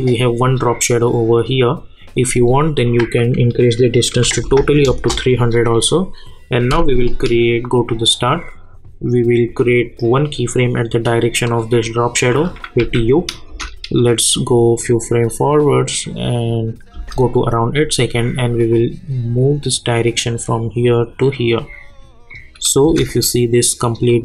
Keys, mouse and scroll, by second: 2.3 click, 4.8 Return, 8.2-11.4 drag, 12.8 u, 13.5 space, 16.9 space, 17.3-22.8 drag, 22.8 space.